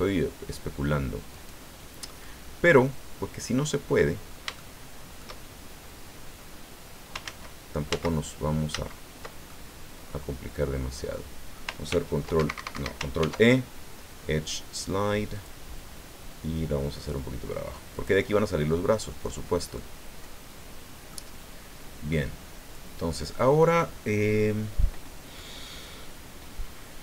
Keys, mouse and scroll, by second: 1.3 click, 2.2-4.1 drag, 4.2-4.5 scroll up 3, 4.5 shift+click, 7.2 ctrl+z, 8.7 ctrl+z, 9.5-11.3 ctrl+drag, 11.9 ctrl+r, 12.3 ctrl+Escape, 15.3 click, 17.9 click, 19.3 scroll down 2, 19.7-21.3 drag, 21.6 scroll down 2, 22.1-23.7 drag.